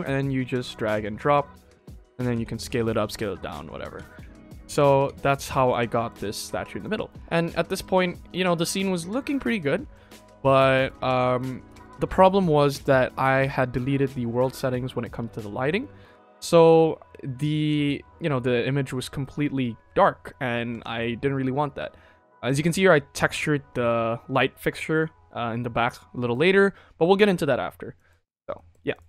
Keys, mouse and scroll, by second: 1.7 middle click, 2.0 click, 2.3 s, 3.6 ctrl+z, 4.0 ctrl+z, 4.5 ctrl+z, 4.8 ctrl+z, 5.1 ctrl+z, 5.6 click, 5.9 middle drag, 6.4 ctrl+s, 6.5 scroll down 2, 6.7 click, 7.2 scroll up 2, 7.5 middle drag, 8.1 middle drag, 8.5 scroll down 2, 8.9 shift+middle drag, 9.2-9.8 ctrl+middle drag, 10.1-10.6 ctrl+middle drag, 10.7 ctrl+s, 10.8 shift+middle drag, 11.3 middle click, 11.9 ctrl+s, 15.0 click, 16.3-17.0 scroll down 4, 17.0 middle drag, 17.7 ctrl+s, 19.0 KP_0, 20.9 ctrl+s, 22.4 click, 27.9 middle click, 28.1-28.5 scroll down 3, 28.5 middle drag, 28.9 click.